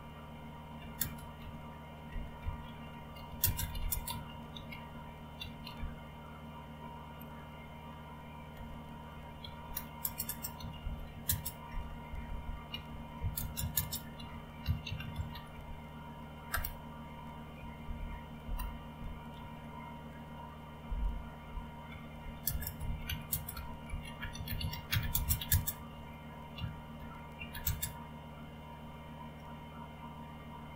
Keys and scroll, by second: 0.0-6.2 typing, 8.6 Return, 10.0-16.0 typing, 16.5 Return, 17.8 ctrl+o, 18.4 Return, 19.4 ctrl+x, 21.7-28.0 typing.